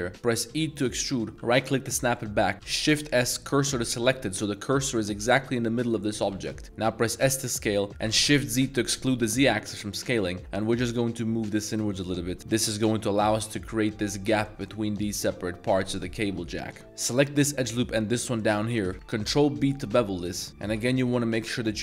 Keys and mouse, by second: 0.4 e, 2.0 middle click, 2.9 shift+s, 3.7 shift+s, 4.1 z, 4.7 middle click, 5.3 middle drag, 6.3-8.2 typing, 6.5 middle click, 12.0 click, 12.4 Tab, 16.5 middle click, 16.8 2, 17.1 alt+click, 17.4-17.8 middle drag, 18.4 alt+shift+click, 18.8 shift+middle drag, 19.2 ctrl+b.